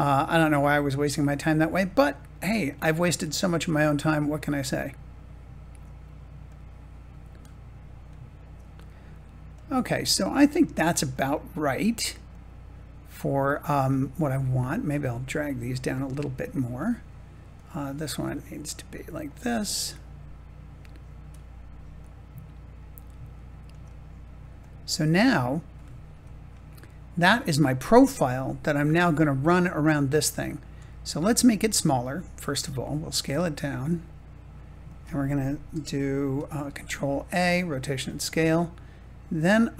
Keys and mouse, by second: 0.7-2.6 drag, 3.6 click, 4.7 click, 6.4-8.4 drag, 9.5 click, 10.0 click, 11.0-13.3 drag, 14.2 click, 14.5 click, 15.8 click, 19.8 click, 21.9 click, 24.5 click, 26.0 Tab, 26.8 click, 28.0 shift+middle click, 30.8 shift+click, 32.2 s, 36.5 ctrl+a, 39.3 click.